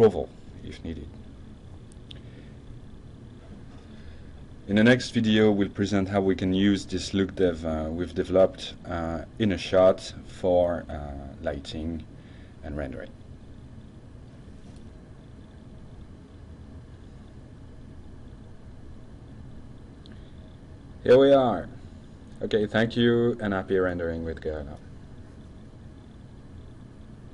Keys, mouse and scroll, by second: 0.0 middle click, 0.3 middle click, 0.9 click, 1.6-2.0 middle drag, 2.3 drag, 3.0 middle click, 3.7 click, 4.1-5.1 middle drag, 5.3 click, 6.3 Tab, 7.1 drag, 7.4-8.3 drag, 9.1 drag.